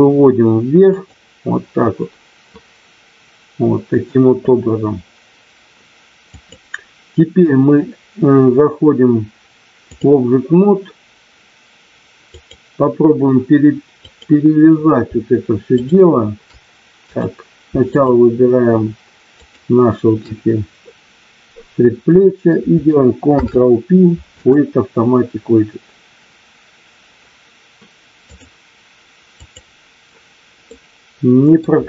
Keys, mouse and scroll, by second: 0.8 click, 6.3-10.0 drag, 12.3 click, 15.8 shift+click, 17.0 click, 19.4 shift+click, 23.3 ctrl+p, 28.2 click, 29.3 click, 30.7 middle click.